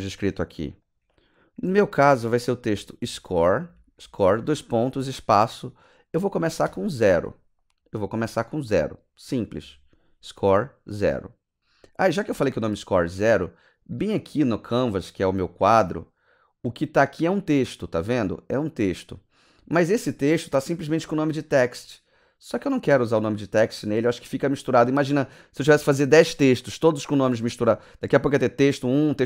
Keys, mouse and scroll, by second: 0.2 click, 1.6-4.9 typing, 6.6 KP_0, 14.0 click, 14.8 click, 17.0 click.